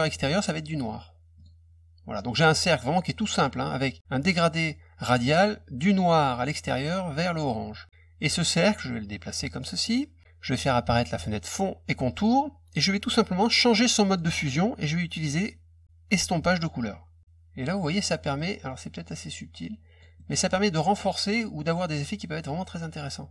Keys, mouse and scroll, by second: 0.0 click, 1.3 click, 8.3-9.6 drag, 12.0 click, 14.0 click, 16.5 click, 17.2 click, 18.1 middle click, 18.3 middle click, 19.0 click, 20.1 middle click, 20.7-23.3 drag.